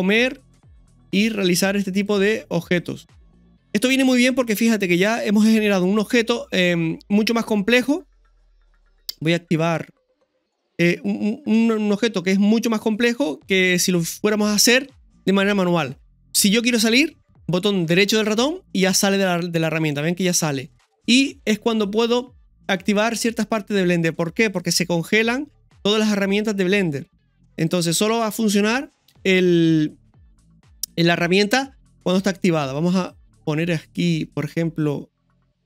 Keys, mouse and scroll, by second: 3.8 scroll down 3, 6.3 scroll up 2, 10.8 scroll up 1, 16.3-17.4 scroll down 1, 21.7-29.9 drag, 29.9 scroll up 2, 30.3-31.4 middle drag, 33.0-35.6 drag.